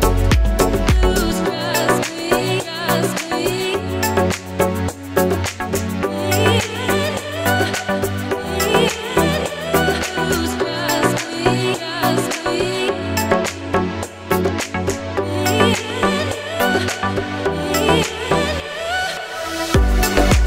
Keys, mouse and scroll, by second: 2.1 click, 4.8 click, 6.6 click, 10.3 click, 16.6 scroll up 1, 17.2 click, 17.6-18.0 scroll up 1, 18.0 scroll down 1, 19.7 click.